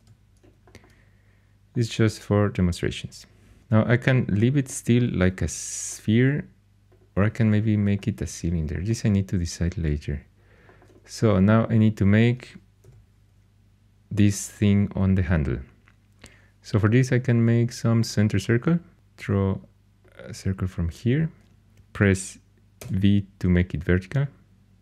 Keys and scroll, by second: 0.0 x, 1.9 x, 12.8 h, 22.8 v.